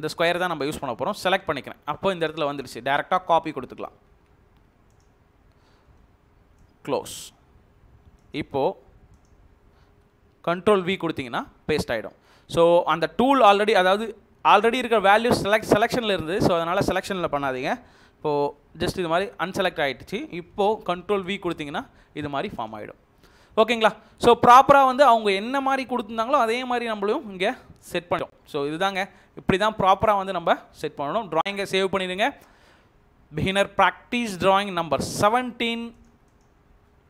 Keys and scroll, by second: 3.9 ctrl+c, 10.8 ctrl+v, 16.1 ctrl+z, 18.5 Right, 19.4 Left, 21.2 ctrl+v, 23.9 Escape, 31.6 ctrl+s, 36.7 BackSpace.